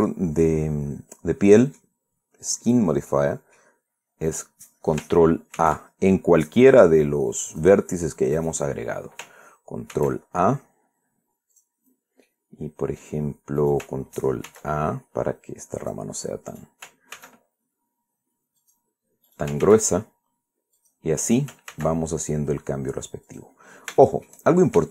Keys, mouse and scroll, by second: 0.7-2.7 drag, 2.8 scroll up 2, 3.4 scroll down 2, 3.8 middle click, 5.0 right click, 6.3 ctrl+a, 8.2 click, 9.1 right click, 10.6 ctrl+a, 12.2 click, 13.0 middle click, 14.3 ctrl+right click, 15.2 ctrl+a, 16.5 click, 17.2 right click, 17.8 ctrl+a, 19.3 click, 20.0 ctrl+right click, 20.3 ctrl+a, 21.5 click, 22.0 ctrl+right click, 22.4 ctrl+a, 24.0 click, 24.3 scroll down 1, 24.7 shift+middle click.